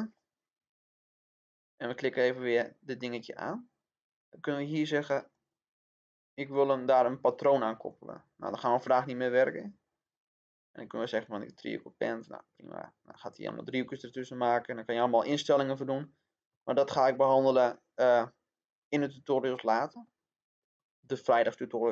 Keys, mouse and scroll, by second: 9.9-10.2 scroll down 1, 11.0-12.1 drag, 14.1-18.1 middle drag.